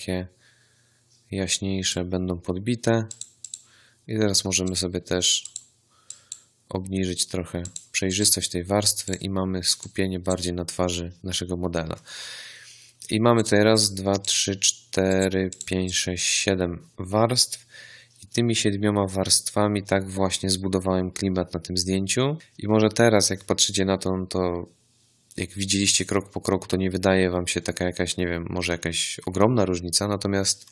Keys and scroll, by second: 9.4 z.